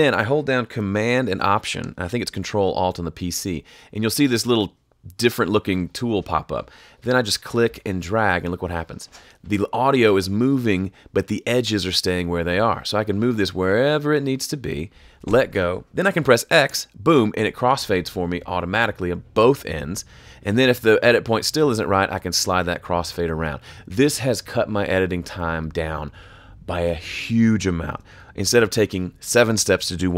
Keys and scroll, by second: 16.6 x.